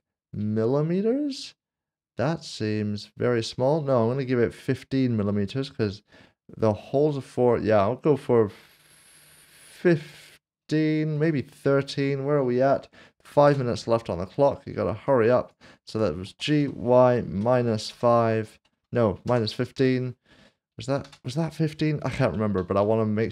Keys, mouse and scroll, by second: 10.5 BackSpace, 11.9 typing, 13.5 Return, 15.0 click, 16.3-17.9 typing, 19.3 typing, 21.0 typing, 22.5 ctrl+z.